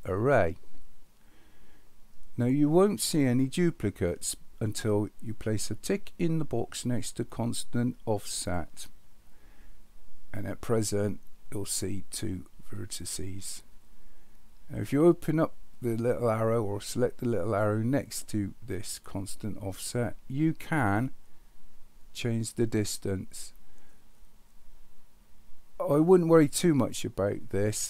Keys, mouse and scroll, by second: 0.0 click, 8.2 click, 17.4 click, 21.0-26.9 drag.